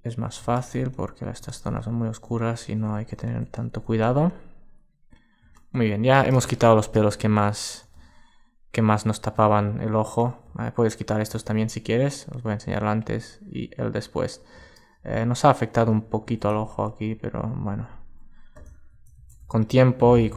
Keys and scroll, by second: 5.1 alt+space, 7.0 super+space, 9.6 alt+space, 14.6 super+space, 18.8 super+z, 19.2 alt+space.